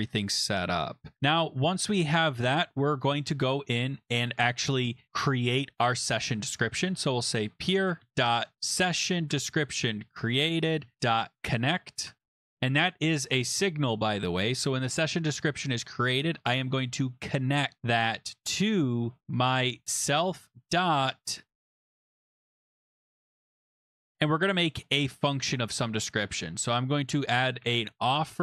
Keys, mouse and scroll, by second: 0.7-1.1 scroll down 1, 1.1 click, 1.3 click, 2.4 Return, 3.8 scroll, 6.6-9.0 typing, 9.3 Tab, 10.7-11.6 typing, 12.1 Tab, 17.8 click, 18.9 click, 19.3-20.6 typing, 22.4 click, 22.5 click, 22.7 ctrl+f, 23.4 click, 23.7 click, 25.6 click, 27.4-28.4 typing.